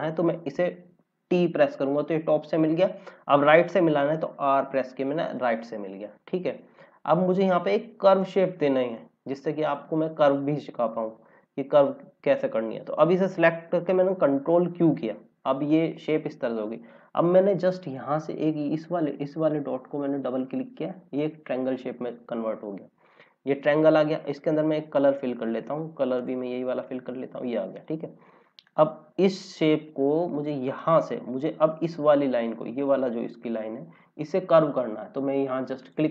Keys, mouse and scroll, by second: 1.2 t, 4.2 r, 5.2 click, 5.8 scroll down 1, 6.4 click, 9.8 click, 11.0-13.0 scroll up 2, 14.6 ctrl+q, 18.7 scroll up 1, 20.3 click, 21.1 scroll down 1, 22.6 scroll up 1, 26.1 click, 29.4 scroll up 1, 30.7 click, 35.8 click.